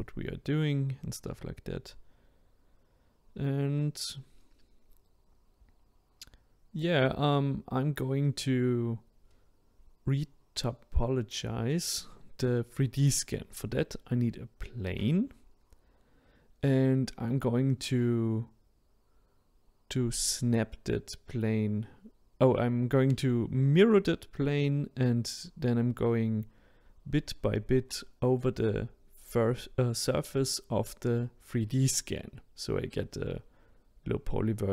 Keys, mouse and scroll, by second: 0.7-5.1 drag, 5.1-5.7 middle drag, 5.7 click, 6.1-6.6 scroll down 2, 6.6-11.8 middle drag, 11.8 shift+a, 14.1-19.0 middle drag, 19.0-20.1 scroll down 1, 20.1 click, 21.1-21.9 middle drag, 21.9-22.4 scroll down 3, 23.2 click, 23.6 click, 24.2-25.2 middle drag, 25.2 scroll up 6, 25.7-26.8 scroll down 3, 26.8-28.6 middle drag, 28.6 click, 29.3-30.7 middle drag, 30.7 click.